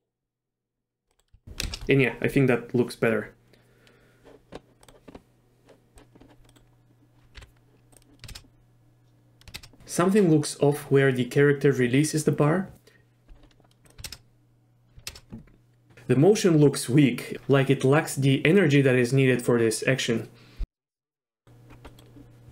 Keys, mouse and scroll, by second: 1.1 click, 1.6 shift+space, 7.4 n, 8.0 drag, 8.3 shift+space, 9.6 shift+space, 14.1 shift+space, 15.1 shift+space, 21.2 middle click, 21.9 middle click.